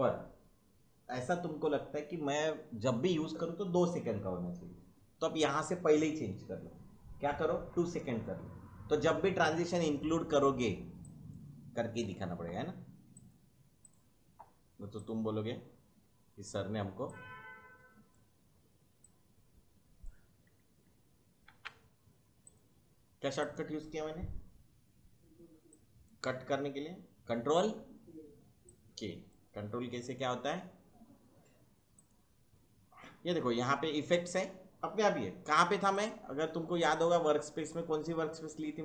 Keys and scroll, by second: 12.0 2, 21.5 ctrl+k.